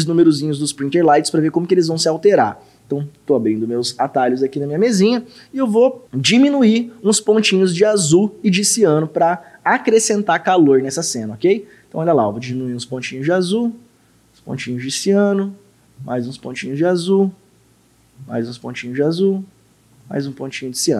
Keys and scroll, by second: 12.5 ctrl+6, 12.9 ctrl+6, 14.5 ctrl+-, 16.0 ctrl+6, 20.0 ctrl+-.